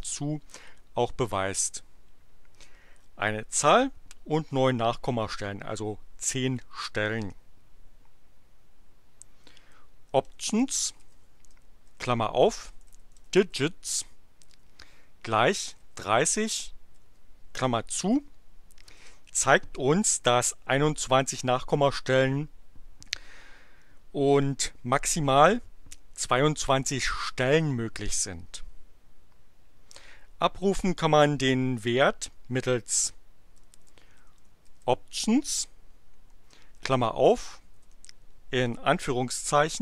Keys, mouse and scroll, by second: 9.8-16.9 typing, 18.9 Return, 33.2-35.3 typing, 36.8 shift+8, 39.3-39.8 typing.